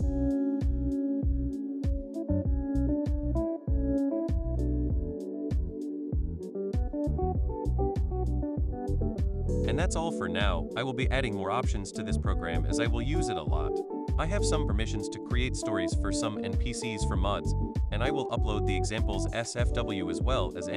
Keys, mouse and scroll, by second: 6.0 click, 8.4 click, 11.0 click, 18.3 click, 19.1 click, 19.9 click.